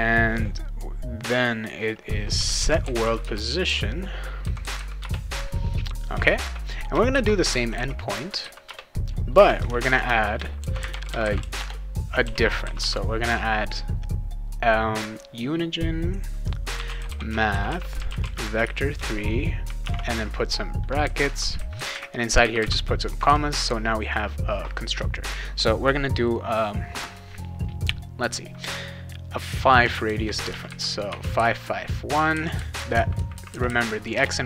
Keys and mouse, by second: 2.1-4.2 typing, 5.0 Return, 6.2-8.2 typing, 8.6 Return, 9.3-13.3 typing, 16.5-21.2 typing, 22.4 ,, 22.6 ,, 29.8 5, 30.5 5, 31.1 1, 34.1 BackSpace.